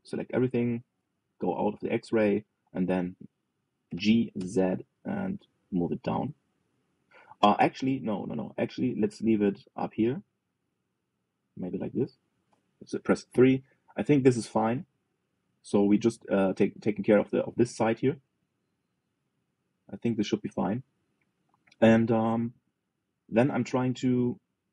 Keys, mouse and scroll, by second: 1.7 alt+z, 2.0-2.5 scroll up 3, 2.5-4.6 shift+middle drag, 4.6 g, 14.0 KP_3, 22.9-24.7 shift+middle drag.